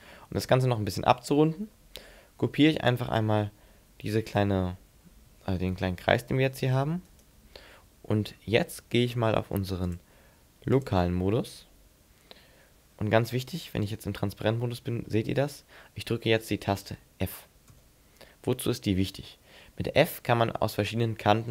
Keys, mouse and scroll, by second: 5.9 shift+d, 7.2 right click, 7.6 middle click, 9.8 click, 13.9 z, 15.1 shift+middle click, 15.7 scroll down 5, 16.1-17.1 scroll up 12, 17.7 f, 20.0-20.5 scroll down 6, 20.7 scroll up 4, 21.1-21.5 scroll down 3.